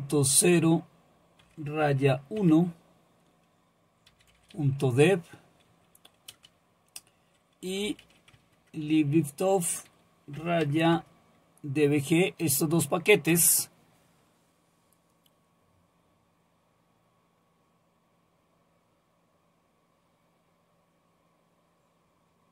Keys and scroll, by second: 1.4 -, 1.8 1, 2.4 Tab, 3.9-5.1 typing, 6.3 typing, 7.4-8.5 typing, 10.1-10.9 typing, 11.0 Tab, 13.3 Return.